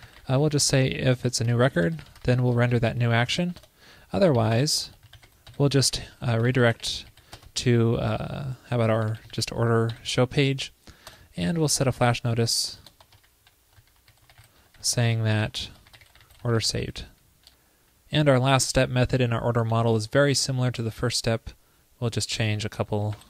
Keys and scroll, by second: 2.9 super+Left, 3.3 super+Right, 19.7 super+c, 20.3 super+v.